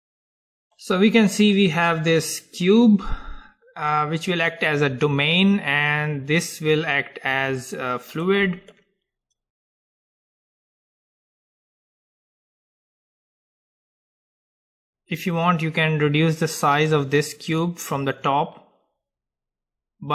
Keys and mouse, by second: 2.4-4.4 drag, 4.4-5.4 middle drag, 6.1-8.1 drag, 8.1-13.6 middle drag, 14.6-16.6 drag.